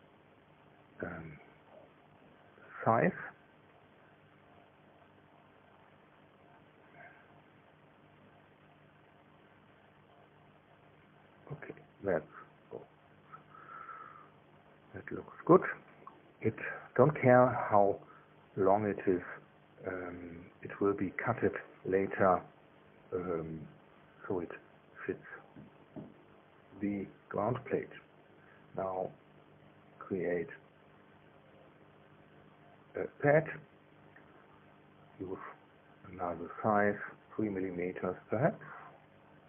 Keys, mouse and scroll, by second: 1.9-5.6 typing, 9.8-12.7 drag, 13.1 click, 17.4-23.3 middle drag, 20.2 KP_1, 21.0 KP_3, 26.2 click, 31.0 click, 33.0 click, 35.1 KP_2, 36.5 BackSpace, 37.5 KP_4.